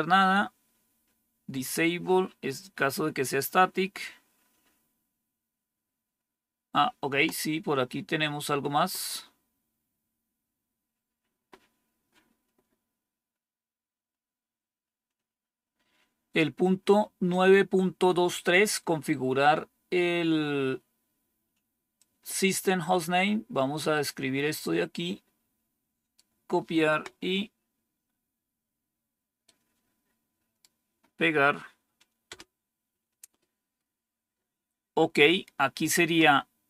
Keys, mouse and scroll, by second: 0.6 scroll down 1, 1.3-2.4 scroll down 2, 2.4-3.1 scroll down 1, 3.1-5.0 scroll down 1, 5.0-6.2 scroll down 1, 6.2-7.2 scroll down 1, 7.2-13.4 scroll down 1, 13.4-14.7 scroll down 1, 14.7-15.3 scroll down 1, 15.3-21.8 scroll down 1, 21.8-23.7 drag, 24.5-26.0 right drag, 29.3-30.5 right drag, 32.1 Return.